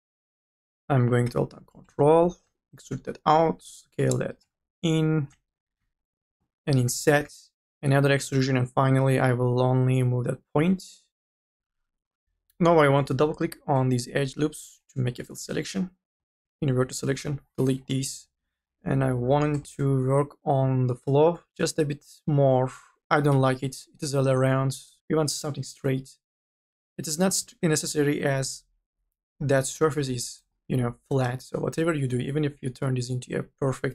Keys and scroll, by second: 0.1 3, 3.6 t, 6.9 e, 8.3 1, 15.0 u, 15.4 f, 16.8 u, 17.1 i, 17.3 Delete, 18.4 1, 19.1 m, 19.4 e, 23.1 3, 29.2 3, 29.8 u, 30.2 n, 33.2 u, 33.6 z.